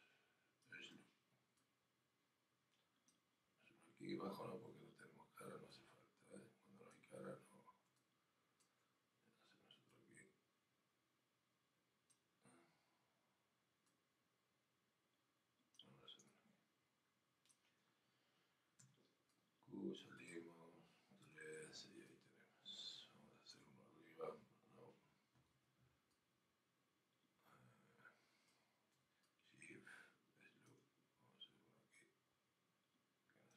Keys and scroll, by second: 21.2 3.